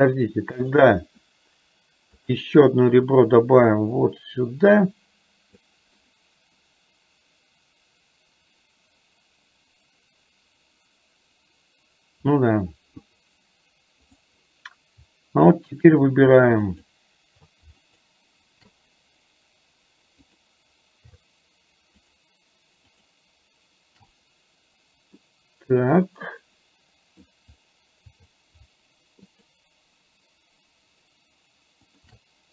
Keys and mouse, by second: 2.3 click, 3.9-5.7 drag, 16.7 shift+click, 17.9 click, 20.3 click, 21.2 shift+a, 22.2 click, 22.9 click, 25.3-27.3 middle drag, 29.4 click, 29.4 shift+a.